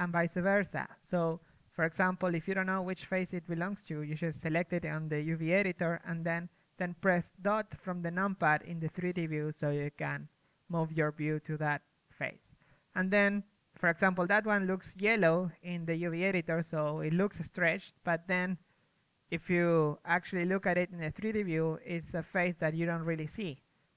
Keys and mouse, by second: 0.5-1.7 middle drag, 1.7 click, 1.9 KP_1, 3.3-7.1 right drag, 5.1 a, 5.9 z, 6.5 z, 7.1 middle click, 7.9 KP_Decimal, 10.0 KP_3, 10.8 a, 13.5 KP_1, 16.2 z, 18.8 middle click, 19.7 middle click, 20.1-23.9 middle drag.